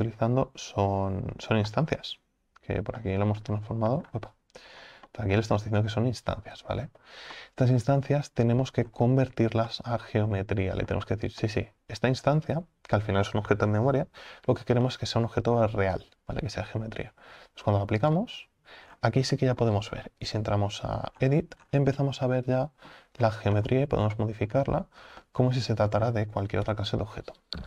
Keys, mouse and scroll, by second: 8.9-9.7 scroll up 4, 9.7-18.2 middle drag, 18.2 click, 18.9-19.3 scroll down 4, 19.3-20.6 middle drag, 20.6 Tab, 21.2-22.3 scroll up 13, 22.3 middle click, 23.1-24.2 scroll down 12, 24.2 middle click, 24.8 Tab, 25.2-26.0 shift+middle drag, 26.0-26.7 scroll down 3, 26.7 KP_7.